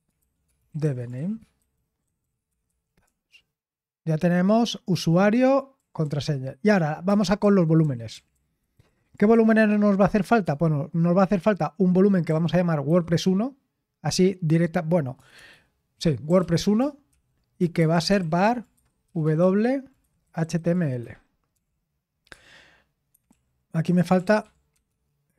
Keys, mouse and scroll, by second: 0.0-3.1 typing, 6.0-10.0 typing, 12.0-13.4 typing, 15.2-25.3 typing, 21.0 Escape.